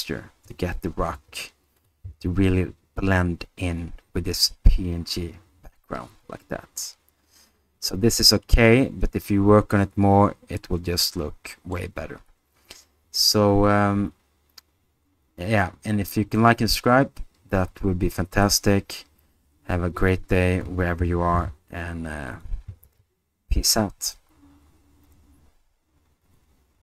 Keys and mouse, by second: 1.1 g, 1.8 click, 10.6-11.8 middle drag, 21.0 r, 21.3 z.